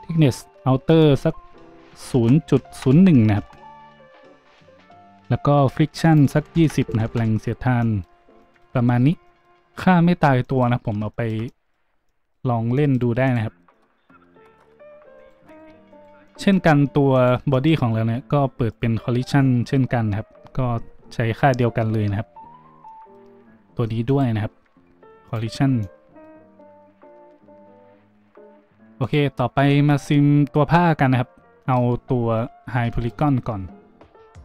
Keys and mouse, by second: 9.2 a, 13.2 middle click, 13.3-15.2 drag, 15.2 middle click, 15.2 click, 15.5 middle click, 15.9 middle click, 17.1 middle click, 24.0 middle click, 29.0 middle click, 29.0 a, 31.9 z, 32.4 z, 32.8-34.4 shift+drag.